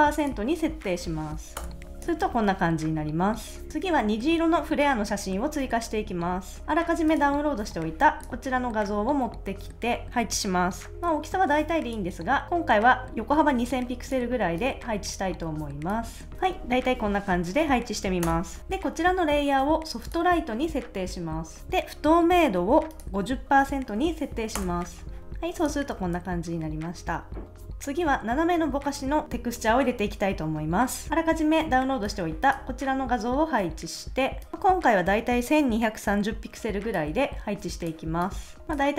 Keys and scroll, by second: 0.7-1.6 typing, 2.2 super+s, 18.2 Return, 23.5-24.5 typing, 24.6 Return, 25.9 super+s.